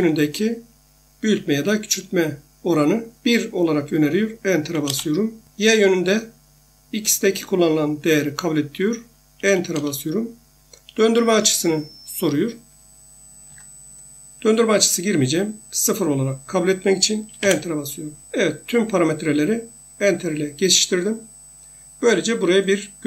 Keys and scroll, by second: 4.8 Return, 13.5 F8, 17.4 Return.